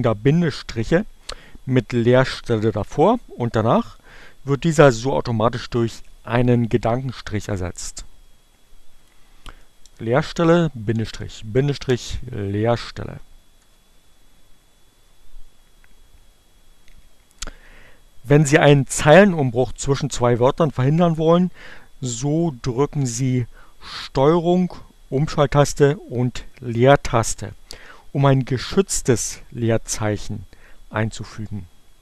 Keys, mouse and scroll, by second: 8.6 click, 11.1 space, 11.2 Right, 13.5 Return, 13.9 Delete.